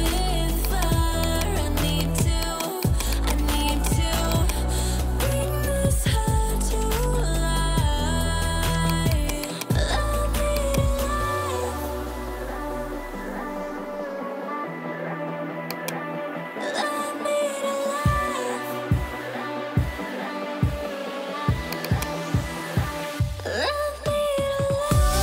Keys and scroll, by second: 6.6 ctrl+j, 11.7 BackSpace, 12.2 Right, 12.6 BackSpace, 14.2 3, 14.3 Return, 22.5-23.4 typing.